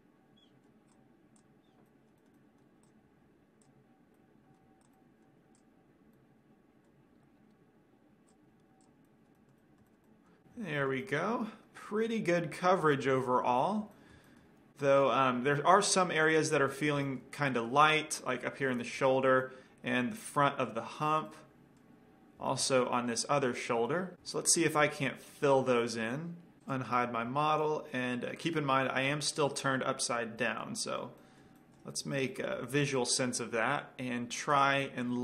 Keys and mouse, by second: 0.1 right drag, 0.5 middle click, 1.1-1.8 right drag, 1.5 click, 2.0 middle drag, 2.2 click, 2.2 right click, 2.4-3.1 middle drag, 3.1 right click, 3.8 click, 4.3 right drag, 4.4-4.8 middle drag, 5.1-6.8 middle drag, 8.4-9.6 drag, 9.6-16.8 middle drag, 28.1-30.8 middle drag, 33.3-35.2 middle drag, 35.1-35.2 right drag.